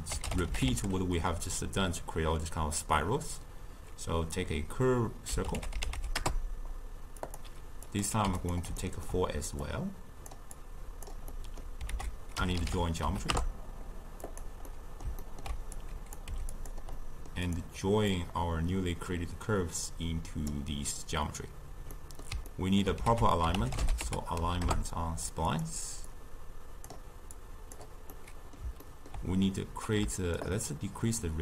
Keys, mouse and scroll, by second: 7.9 click, 8.8-9.7 ctrl+middle drag, 9.7-10.7 drag, 11.3-12.0 middle drag, 12.0 ctrl+a, 14.7-15.8 middle drag, 15.8-16.3 drag, 16.3 g, 17.0-17.5 middle drag, 17.5 click, 18.2 drag, 22.0-23.1 middle drag, 23.1 ctrl+a, 26.1-27.5 drag, 28.2-30.5 middle drag, 30.5-31.4 shift+drag.